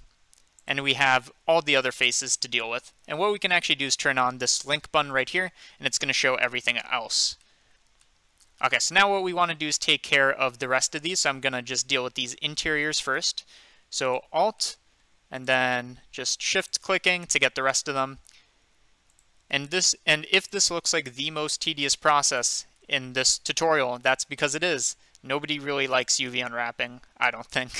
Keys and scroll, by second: 13.1 2, 17.4 2.